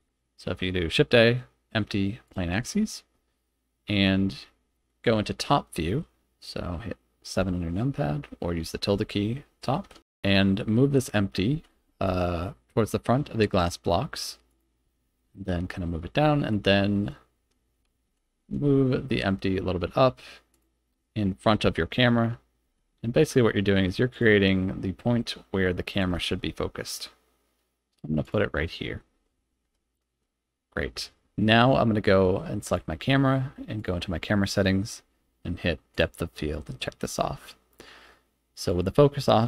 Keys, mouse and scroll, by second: 5.6 middle click, 7.2 KP_7, 11.4 g, 11.8 y, 14.4 click, 15.1-16.4 middle drag, 18.0 g, 18.4 z, 20.4 click, 21.5 KP_0, 22.6 g, 22.6 x, 24.0 click, 24.6-25.1 middle drag, 25.1 click, 25.9 g, 26.2 y, 28.1 click, 28.6-28.9 middle drag, 29.5 KP_0, 30.5-32.2 scroll down 1, 32.6 click, 33.7 click, 35.8 click, 38.5-39.4 drag.